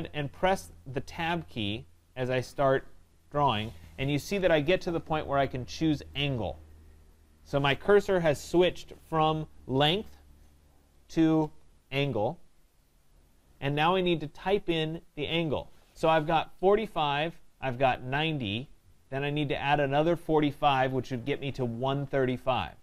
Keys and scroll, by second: 1.3 Tab, 8.4 Tab.